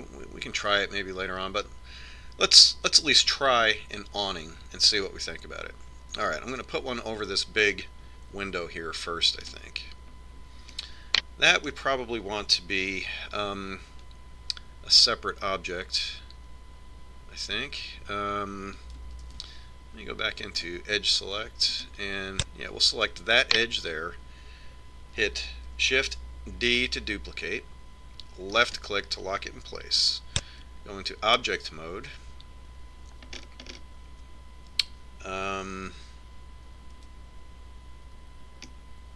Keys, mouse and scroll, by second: 11.1-12.8 right drag, 12.4 click, 12.8-14.1 middle drag, 14.4 Tab, 20.9 ctrl+Tab, 23.4-25.3 right drag, 28.3 shift+d, 32.2 Tab, 35.4-37.4 middle drag, 38.8 Tab.